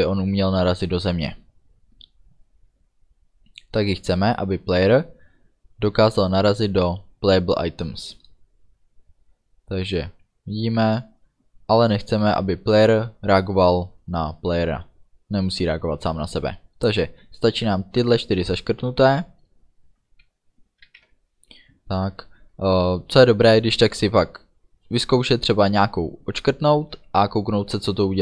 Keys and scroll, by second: 20.9 ctrl+s.